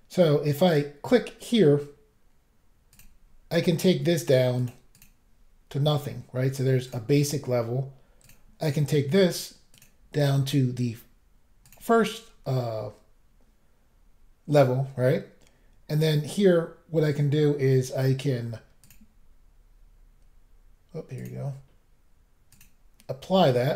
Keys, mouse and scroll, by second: 0.7 click, 0.7 click, 2.9 click, 3.0 click, 4.2 click, 4.3 click, 4.6 click, 4.7 click, 4.9 click, 5.0 double click, 5.8 scroll up 1, 6.9 click, 6.9 click, 8.2 click, 8.5 click, 9.7 click, 9.8 click, 10.2 click, 11.5 double click, 11.6 double click, 11.7 double click, 18.8 click, 18.9 click, 21.2 click, 21.2 click, 22.5 click, 22.6 click.